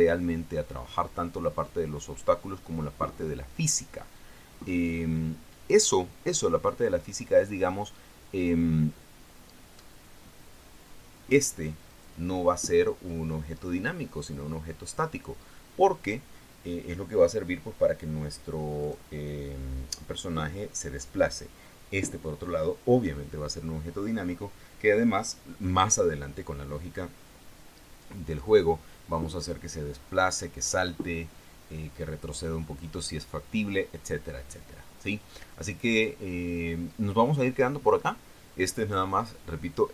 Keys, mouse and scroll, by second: 12.2 right click, 19.2 right click.